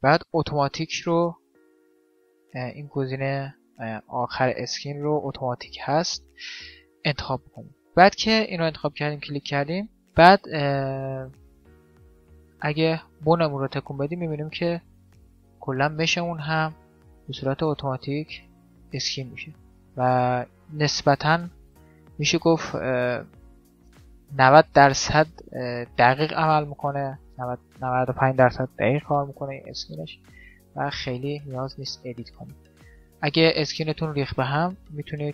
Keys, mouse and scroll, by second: 9.9-11.1 middle drag, 12.1 right click, 14.1-16.4 middle drag, 15.3 right click, 17.6 middle click, 18.3-19.3 drag, 18.3 right click, 19.6 click, 19.9-22.2 middle drag, 22.2 click, 22.2-23.7 right drag, 23.4 click, 23.7-27.4 middle drag, 27.4-29.1 drag, 27.4 right click, 28.9 r, 29.1-30.1 middle drag, 29.1 right click, 32.0-33.7 middle drag, 33.1 click, 33.5 g, 33.7 right click.